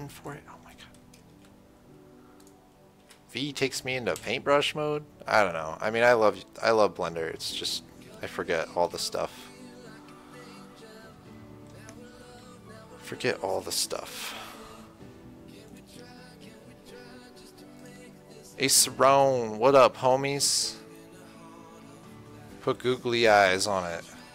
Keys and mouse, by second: 0.0 click, 1.7 v, 3.3 v, 3.9 v, 4.5 v, 6.9 shift+c, 9.2 KP_0, 12.6 KP_1, 17.1 click, 18.1-22.6 right drag.